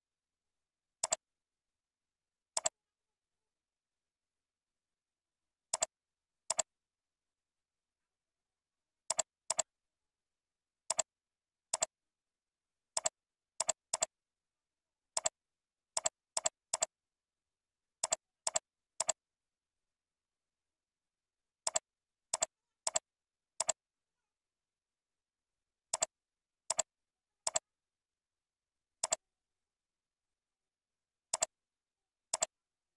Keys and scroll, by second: 7.3 ctrl+b, 27.2 ctrl+c, 27.7 ctrl+v, 32.8 ctrl+c.